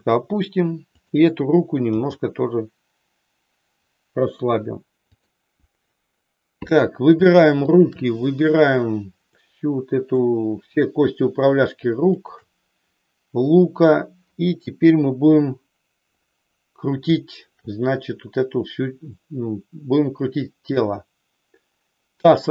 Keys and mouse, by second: 0.0 click, 0.9-2.0 drag, 2.1 g, 9.3 middle click, 12.1 shift+click.